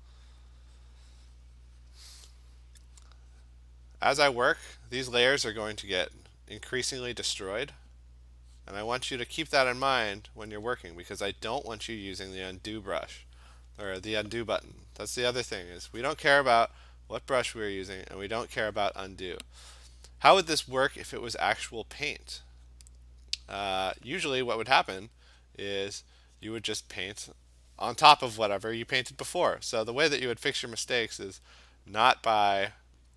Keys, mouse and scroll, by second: 3.6 click, 3.7 click, 3.9 click, 4.2 click, 4.4 click, 7.9 click, 8.6 click, 9.2 click, 9.9 click, 10.7 click, 11.8 click, 12.1 click, 12.5 click, 13.3 click, 13.7 click, 14.1 click, 14.6 click, 15.2 click, 15.4 click, 16.0 click, 16.8 click, 17.5-24.2 drag, 25.2 click, 25.7 click, 26.1 click, 26.4 click, 26.8 click, 30.3 click, 30.6 click, 31.3 click, 32.8 click.